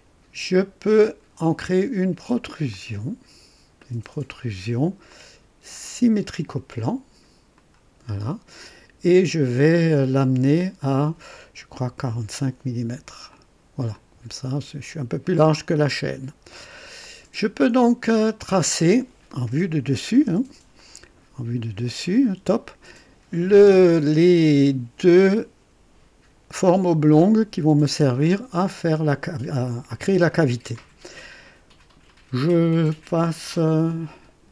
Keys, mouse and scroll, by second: 0.5 click, 2.7 click, 3.8-4.7 right drag, 5.1-6.5 drag, 7.5 click, 10.2 scroll up 2, 11.8 KP_4, 12.1 KP_5, 13.3 click, 13.9-16.9 drag, 16.5 typing, 17.0 click, 18.3 click, 20.1-21.8 typing, 20.8-22.2 right drag.